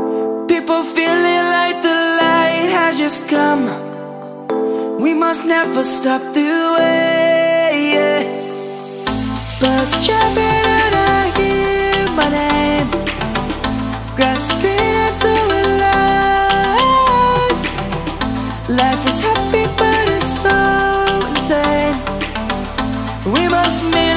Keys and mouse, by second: 7.1 shift+click, 8.9 click, 18.1 middle click, 19.8 ctrl+z, 20.4 ctrl+z, 20.8 middle click, 22.0 click, 22.4 middle click.